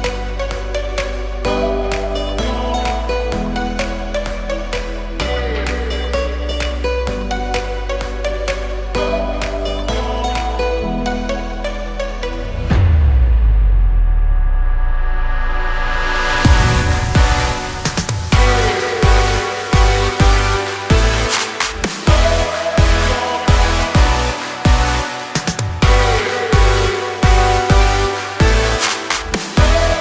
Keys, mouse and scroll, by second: 1.9 click, 3.6 shift+t, 4.0 shift+r, 4.3 shift+Return, 5.6 click, 7.3 ctrl+shift+n, 10.4 click, 11.7 click, 13.0-15.9 typing, 16.9 click, 17.4 click, 17.9 click, 19.1 Right, 19.4 Left, 19.8 BackSpace, 21.2 Return, 24.5 click, 26.2 click, 27.1-28.4 typing, 28.7 KP_Enter.